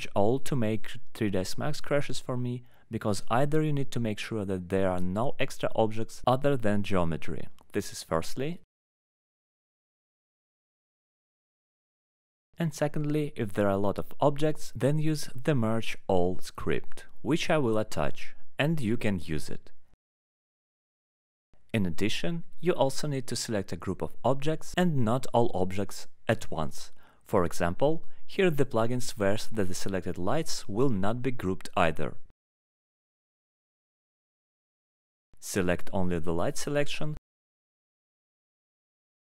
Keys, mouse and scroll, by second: 0.0-1.8 typing, 2.2 Return, 9.9 click, 11.7 click, 17.8 click, 31.0 click, 32.0 alt+middle click, 32.3 click, 34.4 click, 35.0 click, 35.4 click, 36.6 click, 36.6 middle click, 38.4 alt+middle click.